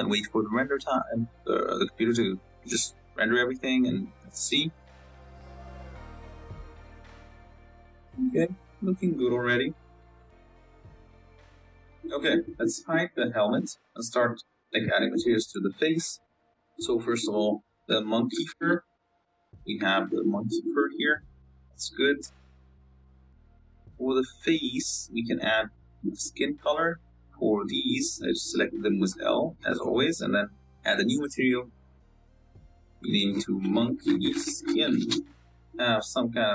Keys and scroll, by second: 0.1 F12, 13.3 h, 20.7 z, 22.5 z, 24.7 Tab, 26.5 a, 27.4 l, 27.7 l, 28.6 l.